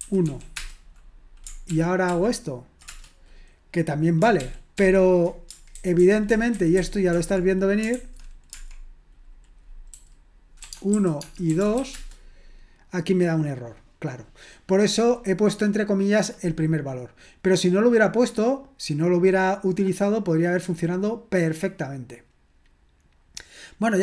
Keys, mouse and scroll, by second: 0.0-1.6 typing, 1.7 ctrl+p, 2.1 ctrl+p, 2.9 Return, 4.4 ctrl+p, 4.8 ctrl+p, 5.7 alt+b, 6.0 alt+b, 6.3 alt+b, 6.6 alt+b, 7.9 alt+b, 7.9 alt+f, 11.6 typing, 11.9 Return, 19.2-20.6 scroll down 1, 20.6-21.4 scroll down 1, 21.4-22.8 scroll down 1, 22.8-24.0 scroll down 1.